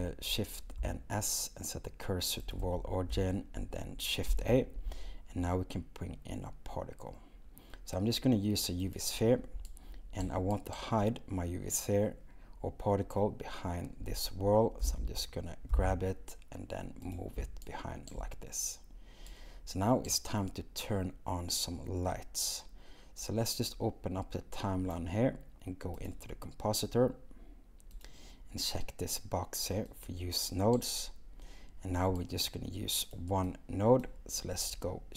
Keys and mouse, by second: 14.8 g, 15.7 x, 23.2 click, 26.1 click, 28.0 click, 29.9 click, 33.1 click.